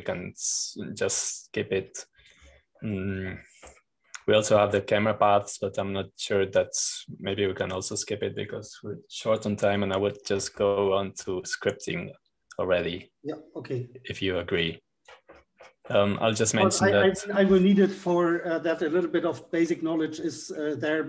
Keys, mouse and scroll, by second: 1.4-2.0 scroll down 2, 2.0-3.0 scroll down 1, 3.0-4.3 scroll down 1, 4.3-6.0 scroll up 2, 6.0-7.1 scroll down 2, 9.3-11.0 drag, 11.8-15.8 scroll down 2, 16.9-18.3 drag, 17.6-18.3 scroll up 2.